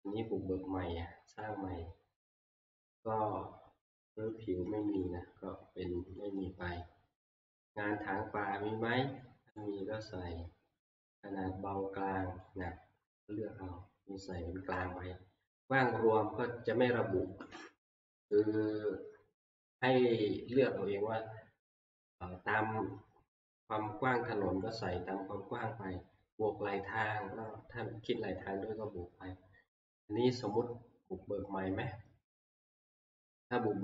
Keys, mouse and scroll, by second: 5.0 click, 6.4 click, 9.6 click, 12.7 click, 18.4 middle click.